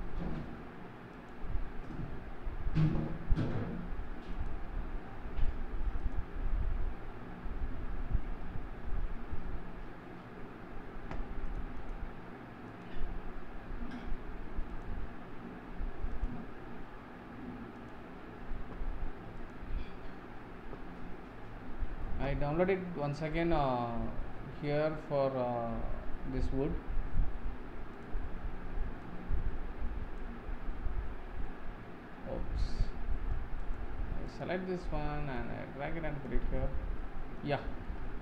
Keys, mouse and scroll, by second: 4.3 click, 6.0-9.1 drag, 11.7 click, 12.6 click, 14.7 click, 17.9 click, 19.3-22.5 drag, 32.0 middle click, 32.0-32.6 scroll up 3, 32.6 scroll down 1, 32.8 middle click, 33.6 click, 34.2 click, 37.0-38.2 middle drag.